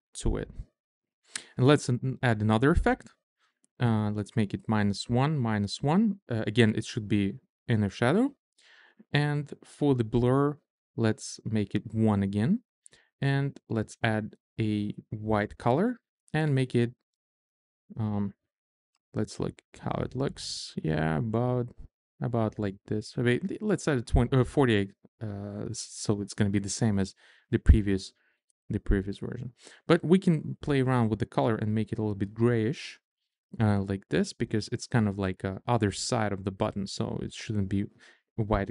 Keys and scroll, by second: 4.7 1, 7.0 1, 12.5 1, 18.3 shift+Down, 19.7 Up, 20.8 shift+Up, 22.2 Down, 23.9-24.9 typing.